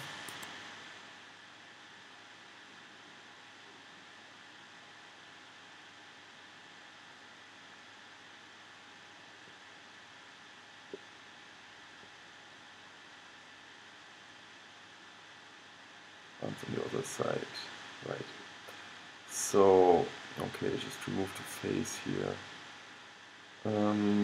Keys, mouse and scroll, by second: 0.9-4.0 middle drag, 5.4 middle click, 6.2 click, 6.5-8.9 middle drag, 8.9 click, 9.4-12.6 middle drag, 13.5 middle click, 21.2-23.2 middle drag.